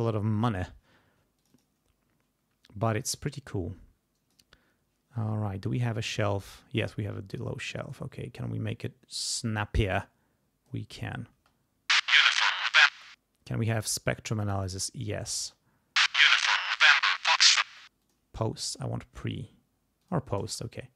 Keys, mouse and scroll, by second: 1.4 click, 2.8-4.5 drag, 6.0-8.1 drag, 9.8 click, 11.3 space, 12.9 space, 14.3 click, 15.4 space, 17.6 space, 18.0 click, 18.7 click, 20.0 click, 20.4 space.